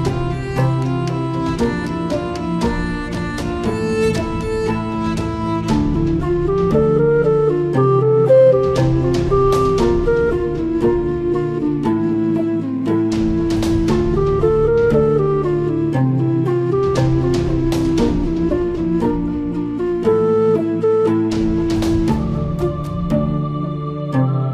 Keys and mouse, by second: 0.2 shift+click, 0.7 middle click, 2.0 middle click, 3.8-6.9 shift+drag, 7.2-9.0 shift+drag, 9.3-10.7 shift+drag, 10.8 middle click, 12.6-13.7 shift+drag, 14.6-17.2 shift+drag, 17.9 middle click, 19.4-21.2 shift+drag, 22.2-23.7 shift+drag.